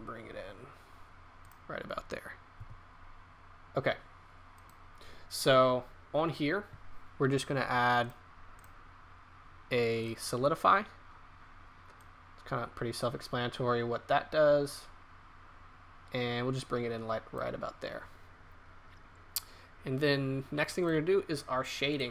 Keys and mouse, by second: 2.5 g, 7.9 click, 11.9-13.6 drag, 21.1 right click.